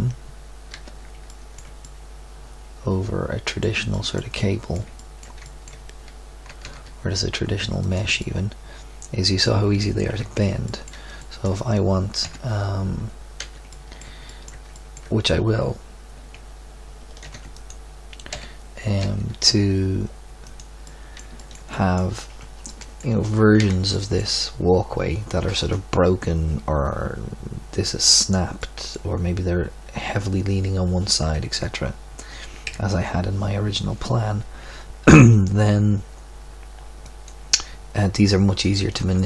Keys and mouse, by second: 0.7 z, 4.0-5.6 middle drag, 6.4 g, 10.0 KP_3, 12.2 KP_7, 13.3 z, 17.2 shift+d, 18.3 g, 22.3 Tab, 23.6 z, 24.0-25.4 middle drag, 28.5 middle click, 31.3 KP_3, 32.6 KP_1.